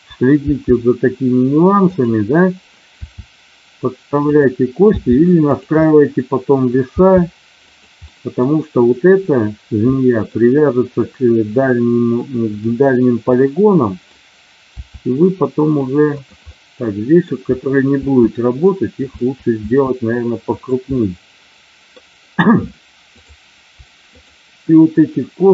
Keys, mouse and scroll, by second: 0.3 g, 3.0 r, 4.2 click, 4.8 g, 5.4 click, 5.8 middle click, 6.8 g, 8.1 middle click, 10.0-12.5 middle drag, 13.3 middle click, 14.7 e, 16.1 click, 16.4 middle click, 17.9 e, 19.0 click, 19.1 e, 19.7 e, 20.5 click, 21.1 middle click.